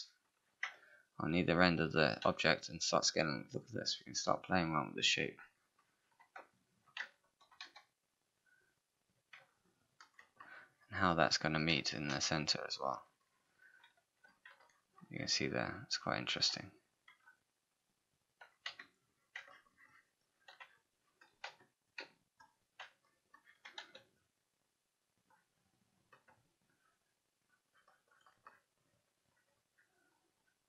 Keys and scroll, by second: 2.2 r, 7.6 w, 11.8 space, 14.1 4, 23.8 r.